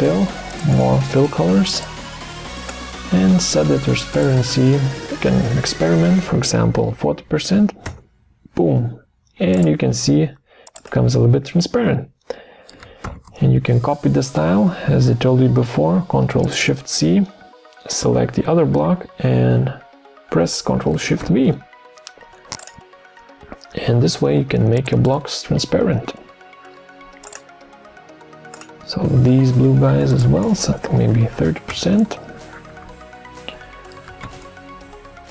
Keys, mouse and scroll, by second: 5.8 4, 6.6 0, 7.9 Return, 13.0 ctrl+shift+c, 21.2 ctrl+shift+v, 31.1-32.1 typing, 34.2 ctrl+shift+c.